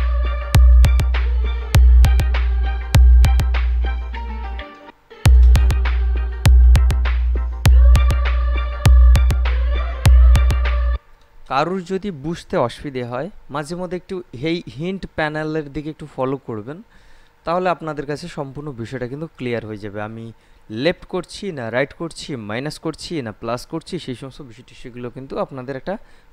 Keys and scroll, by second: 5.0 space, 11.1 space.